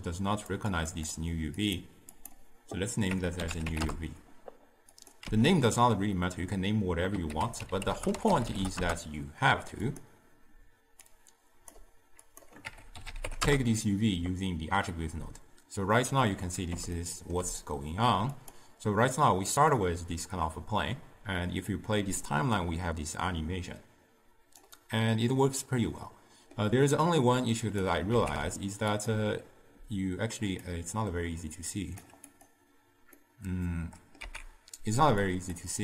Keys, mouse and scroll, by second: 0.8-5.2 drag, 5.5 x, 8.0 a, 12.0-15.8 drag, 17.1-18.6 ctrl+middle drag, 18.6-19.8 drag, 19.8-22.0 middle drag, 22.0-25.1 drag, 25.1-27.9 middle drag, 27.9-29.1 drag, 29.1 z, 30.8-32.5 drag, 33.2-34.3 middle drag, 34.3 z.